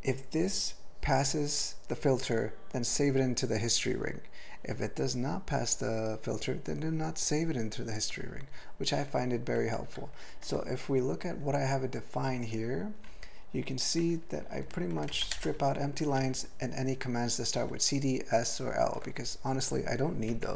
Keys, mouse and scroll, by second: 9.9 ctrl+f, 10.5 ctrl+l, 12.3 ctrl+l, 13.1-13.7 ctrl+n, 14.4 ctrl+p, 14.6 ctrl+p, 15.1 alt+m, 15.3 ctrl+space, 15.4 ctrl+e, 16.1 ctrl+n, 16.2 ctrl+e, 17.6 ctrl+g.